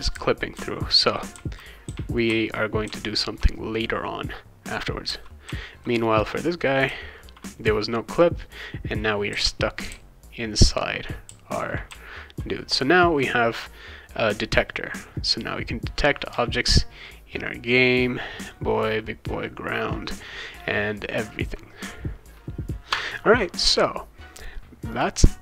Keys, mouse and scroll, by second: 0.1-2.8 typing, 5.1 d, 5.4 w, 6.9 s, 9.3 w, 9.9 d, 11.0-12.3 typing, 16.3 a, 24.9 click.